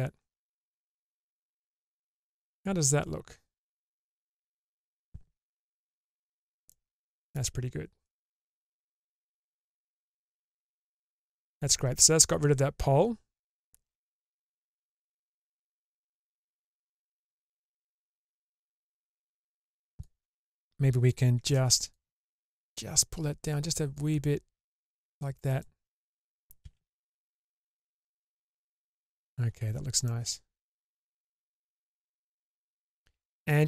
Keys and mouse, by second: 0.9 middle click, 2.6-4.8 middle drag, 5.6 Tab, 6.7-7.3 middle drag, 8.0-9.3 middle drag, 9.7 shift+space, 10.2-11.3 middle drag, 12.1-14.6 middle drag, 14.8 Tab, 15.4 Tab, 16.7-19.0 middle drag, 20.0-21.1 drag, 21.5 alt+z, 22.0 click, 23.9-25.6 drag, 26.6 alt+z, 27.3 Tab, 28.3-29.2 middle drag, 30.1-32.8 middle drag.